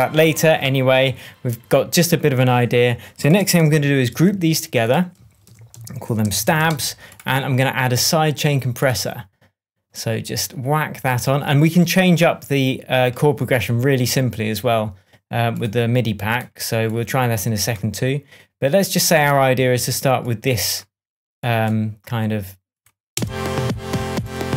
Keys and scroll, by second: 4.2 shift+super+g, 5.4 super+r, 5.8-6.9 typing, 7.6 Return, 23.1 space.